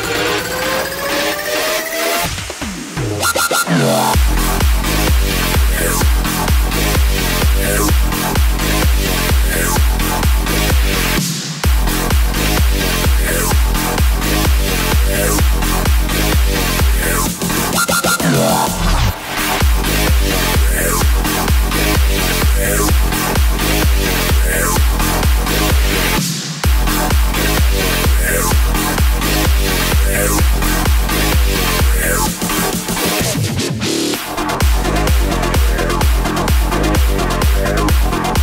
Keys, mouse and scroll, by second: 2.7-6.7 drag, 7.4 click, 9.6-14.1 drag, 16.2 shift+click, 17.5 click, 22.2 r, 24.1 click, 30.8 click, 31.4 click, 34.0 shift+click, 35.8 click.